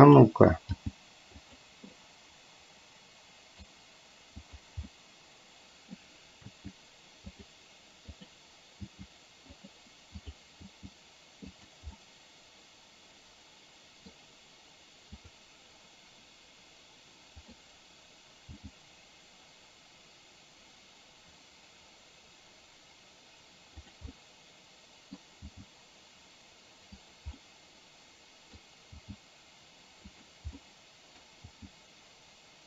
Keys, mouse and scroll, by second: 0.9 g, 2.0-3.6 middle drag, 5.1-6.0 middle drag, 6.5 r, 8.4 click, 9.0 r, 10.7 r, 12.1-14.2 middle drag, 17.5 click, 18.6 g, 24.2-25.2 middle drag, 25.5 g, 27.5-28.6 middle drag, 29.0 g, 30.7 middle click, 31.5 g.